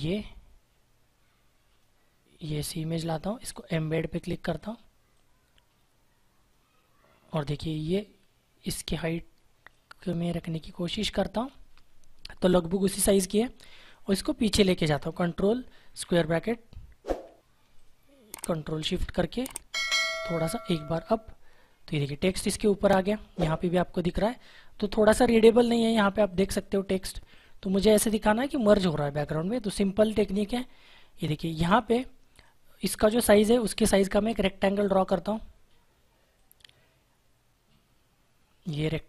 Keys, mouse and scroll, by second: 15.9 ctrl+[, 17.7 ctrl+click, 18.8 [, 20.6 ], 21.9 click, 31.1 click.